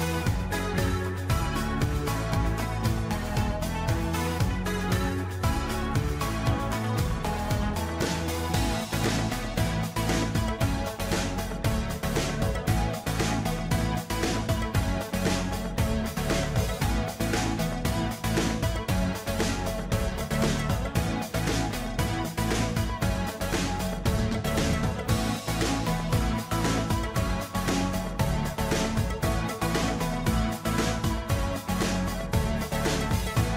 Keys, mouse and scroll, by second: 10.2 ctrl+j, 12.9-14.1 scroll down 3, 14.3 shift+click, 15.6 ctrl+g, 16.6 ctrl+s, 18.4 ctrl+s, 23.5 ctrl+s, 27.2 ctrl+a, 30.2 ctrl+d, 32.9 right click.